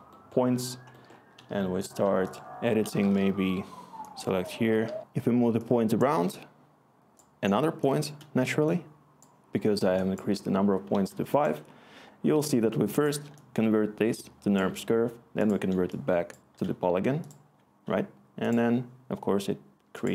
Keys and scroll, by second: 3.6 s, 4.8 t, 13.8-15.4 scroll, 16.2-16.5 scroll.